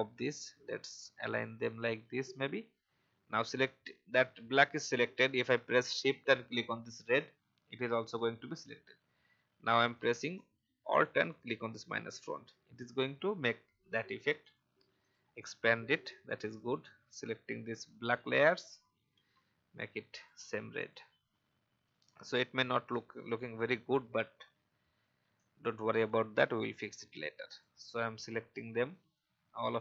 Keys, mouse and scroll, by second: 2.9 alt+scroll down 1, 6.9 shift+click, 8.0 alt+scroll down 1, 11.2 alt+click, 12.7 alt+scroll down 1, 14.4 click, 17.9 shift+click, 20.1 click, 23.5 alt+scroll down 1, 26.9-28.0 drag.